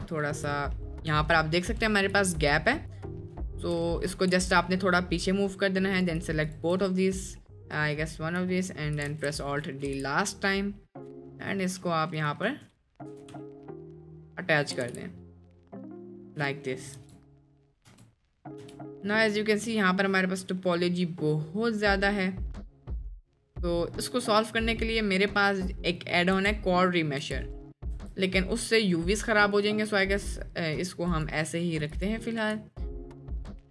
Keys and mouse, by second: 0.8 shift+middle drag, 1.2 middle click, 2.1-2.4 shift+middle drag, 2.7-3.2 middle drag, 3.4 shift+middle drag, 3.9 middle click, 4.3 g, 6.5 shift+click, 7.4 middle click, 7.6 click, 8.1 middle click, 8.6-8.9 shift+middle drag, 9.2 alt+d, 9.9 g, 11.8 g, 13.5 shift+middle drag, 14.4 middle click, 14.8 g, 16.5 drag, 17.3 Tab, 18.0 Tab, 18.4 middle drag, 18.8 Tab, 18.8 middle click, 19.7 middle click, 20.2 middle click, 21.1 middle click, 21.9 middle click, 22.6-24.0 middle drag, 24.4 middle click, 25.0 middle click, 25.9 middle click, 26.4 n, 27.3 n, 28.0 Tab, 29.9 click, 30.3 middle drag, 31.2 drag, 32.0 click, 32.5 space.